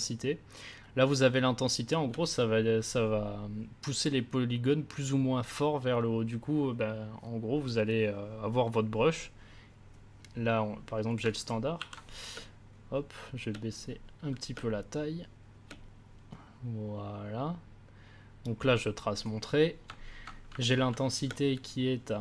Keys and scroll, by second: 11.7 ctrl+z, 12.3 space, 14.5 space, 21.2 space.